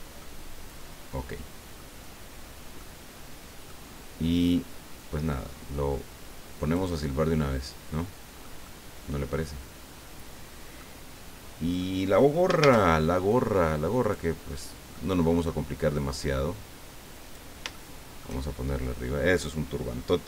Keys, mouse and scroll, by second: 0.2-2.0 drag, 2.1 scroll up 2, 2.8-3.8 drag, 5.0-6.9 drag, 7.0-8.6 drag, 11.4 scroll down 2, 11.8 click, 12.6 shift+a, 14.0 click, 14.9 middle click, 16.2-17.5 drag, 17.7 shift+middle click.